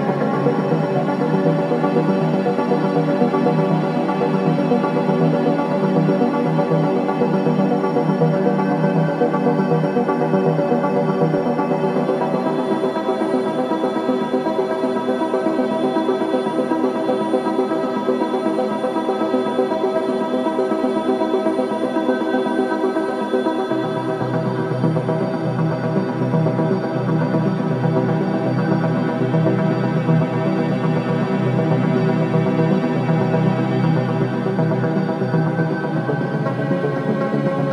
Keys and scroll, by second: 10.1 2, 13.1 ctrl+d, 13.1 Escape, 14.7 Escape, 24.5 ctrl+z, 27.3 4, 30.4 F9, 31.5 3, 33.7 ctrl+d, 33.9 Escape, 35.3 ,.